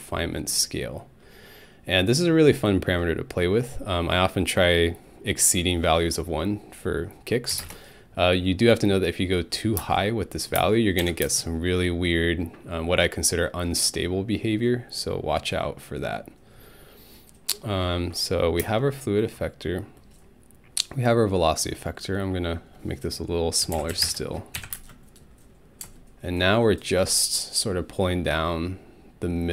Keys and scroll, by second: 7.5 2, 7.6 Return, 9.8 space, 10.6 space, 11.0 Home, 11.2 space, 18.6 space, 23.4-24.7 typing, 24.6 Home.